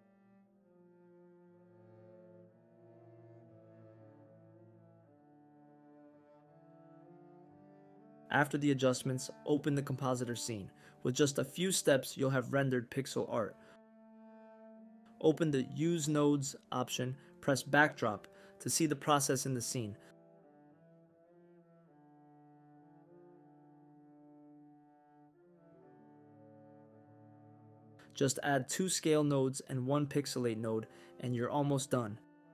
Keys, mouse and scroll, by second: 0.4 click, 1.2 click, 1.5 click, 8.1-10.0 drag, 11.5-13.5 drag, 15.0 click, 16.3 click, 18.7 click, 20.6-22.0 drag, 22.4 click, 23.6 shift+a, 27.8 click.